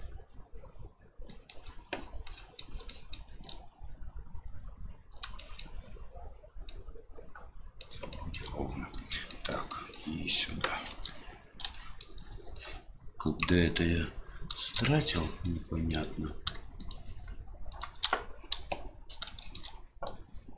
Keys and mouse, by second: 0.0-1.5 shift+middle drag, 2.3 shift+middle click, 2.9 shift+middle click, 5.3 shift+middle click, 6.8-7.8 shift+middle drag, 8.2 shift+middle click, 9.2 shift+middle click, 9.6 shift+middle click, 10.0 shift+middle click, 11.8 shift+middle click, 12.7 click, 14.8 shift+middle click, 15.4 middle click, 16.7 shift+right click, 17.7 shift+right click, 18.5 KP_7, 19.4 shift+middle click.